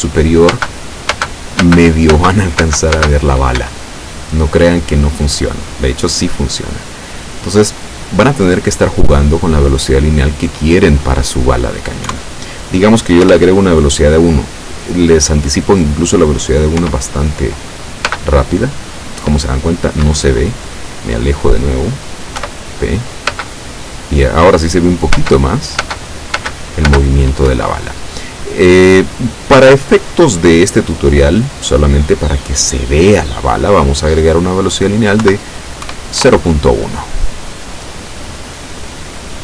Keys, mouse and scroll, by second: 0.6 space, 3.7 Escape, 5.0 scroll up 1, 7.4 click, 9.5 click, 12.1 KP_1, 13.3 Return, 15.4 click, 16.9 p, 18.2 space, 20.2 Escape, 20.6-21.2 scroll down 2, 22.5 p, 23.5 space, 25.2 space, 26.5 space, 27.5 Escape, 28.8 click, 31.5 click, 36.3 KP_Enter, 39.1 click.